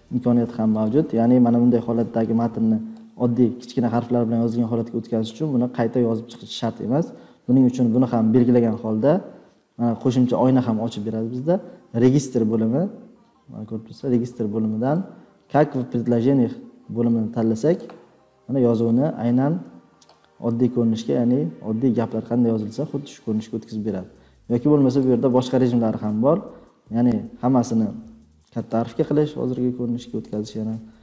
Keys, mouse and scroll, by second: 0.8-1.9 drag, 2.9 click, 15.2 drag, 15.6 click, 17.7 click, 24.8 click, 28.5-29.4 drag, 30.2 click, 30.5-31.0 drag.